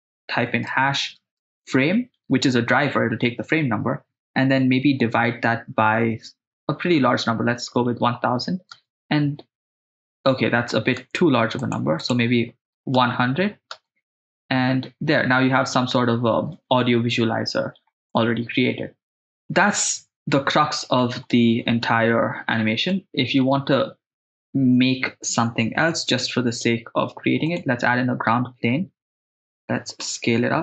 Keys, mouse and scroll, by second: 6.9 0, 7.1 0, 8.7 shift+space, 11.1 shift+space, 11.6 click, 13.9 shift+space, 18.2-19.2 middle drag, 19.2 shift+space, 20.7-21.1 middle drag, 21.3-21.8 middle drag, 23.0 middle click, 26.2 shift+a, 30.1 s.